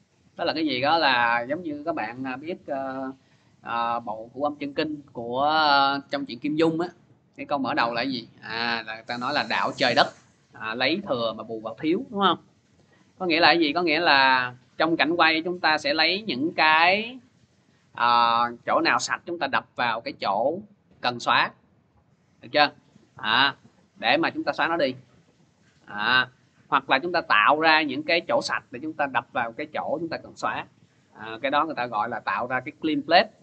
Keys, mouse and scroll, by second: 14.3 click.